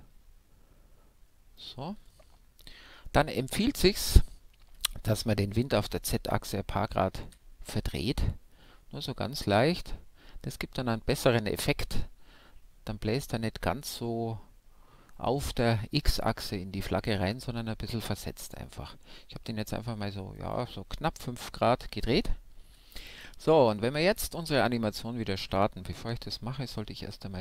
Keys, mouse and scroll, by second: 2.0-7.2 middle drag, 7.2 r, 20.4-22.5 drag, 20.9 middle click, 22.5 middle click, 22.5 KP_5, 23.7-25.7 middle drag.